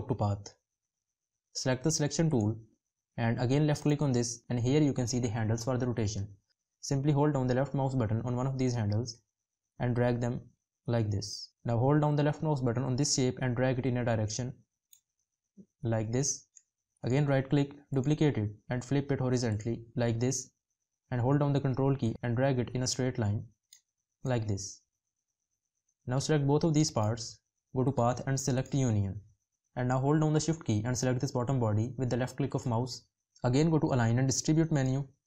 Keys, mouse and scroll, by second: 21.8 ctrl+click, 30.1 shift+click.